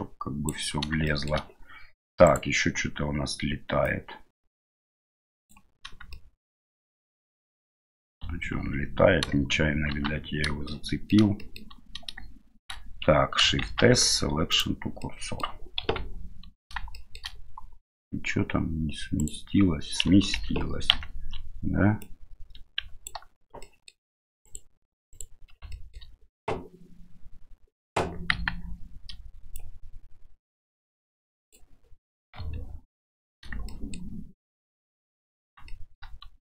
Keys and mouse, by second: 1.2 shift+middle click, 2.3-3.8 right drag, 3.8-5.5 drag, 6.1-6.7 shift+middle drag, 8.6 ctrl+z, 9.9 shift+c, 10.7-11.1 middle drag, 11.4 shift+middle drag, 13.6 shift+s, 15.0-15.4 middle drag, 15.8 KP_7, 17.0 shift+middle click, 19.2 right click, 20.4 ctrl+z, 20.9 ctrl+z, 22.1-23.1 drag, 23.7 middle click, 24.4 shift+right click, 25.1 shift+right click, 25.8 shift+middle click, 28.3 KP_1, 29.5-31.5 drag, 32.4 KP_7, 33.8 shift+middle click, 35.7-36.1 shift+middle drag.